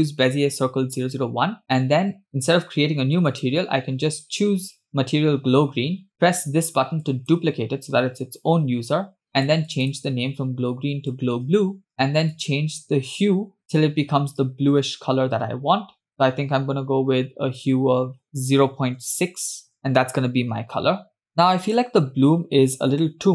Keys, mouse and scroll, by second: 0.8 click, 4.0-5.9 drag, 7.5-8.5 drag, 9.9-11.9 drag, 12.9 click.